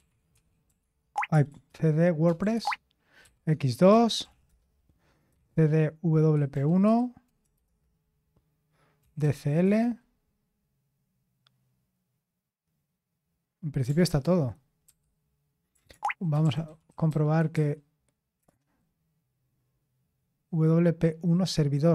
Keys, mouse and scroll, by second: 0.0-9.7 typing, 14.0 ctrl+c, 14.8 typing, 15.9-18.7 typing.